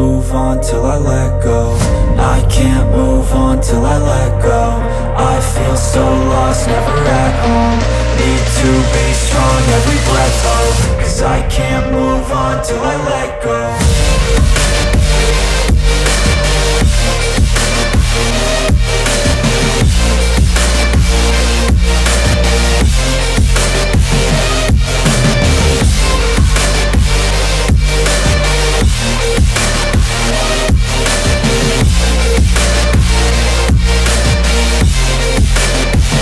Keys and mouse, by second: 4.5 s, 6.9 s, 7.5 s, 9.5 s, 15.9 click, 16.3 shift+d, 16.6-22.3 drag, 18.7 KP_1, 21.9 r, 22.3-23.3 middle drag, 23.3-30.5 drag, 30.5 middle click, 30.9 shift+d, 31.3-35.1 drag, 34.7 s, 35.1 middle click, 35.5-36.2 drag.